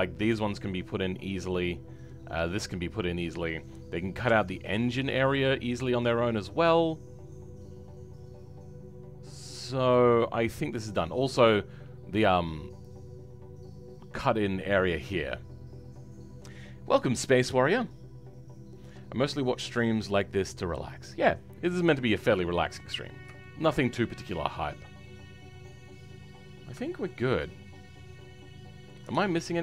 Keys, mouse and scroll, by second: 21.6-22.0 scroll down 1, 22.0 middle click, 22.9-23.4 scroll up 3, 23.4 shift+middle click, 23.8-24.1 scroll up 3, 24.1-26.5 middle drag, 26.5 scroll down 3, 26.8-29.6 shift+middle drag.